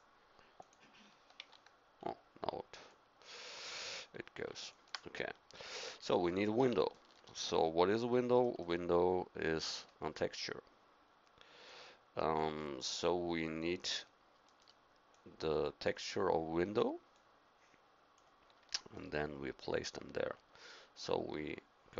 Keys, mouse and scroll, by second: 1.4 ctrl+v, 10.1-11.6 drag, 12.6 click, 14.1 middle click, 15.1 click.